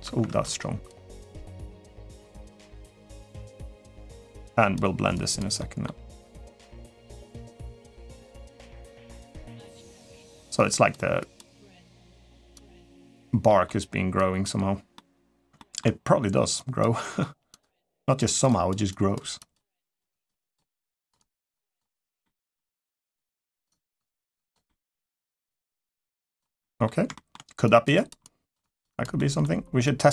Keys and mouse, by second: 0.1 ctrl+z, 0.7 click, 1.8 click, 2.7 click, 3.5 middle click, 4.2 click, 4.9 click, 5.3 middle click, 6.0 click, 6.6 middle click, 7.1 click, 7.8 click, 8.2 click, 8.6 middle click, 9.3 click, 9.8 middle click, 10.3 click, 11.0 click, 11.4 middle click, 11.9 click, 12.3 click, 12.8 click, 13.2 middle click, 13.9 click, 14.7 middle click, 15.3 shift+middle click, 16.3 click, 16.7 middle click, 17.3 click, 17.6 click, 18.1 click, 18.2 click, 18.7 click, 19.1 click, 19.5 click, 19.9 click, 20.1 click, 20.7 click, 20.9 click, 22.0 middle click, 22.7 click, 23.0 click, 23.7 click, 24.4 middle click, 25.2 click, 25.7 click, 26.4 middle click, 26.9 shift+middle click, 27.4 click, 27.7 click, 28.0 click, 28.4 click, 28.7 click, 28.9 middle click, 29.6 click, 29.9 click.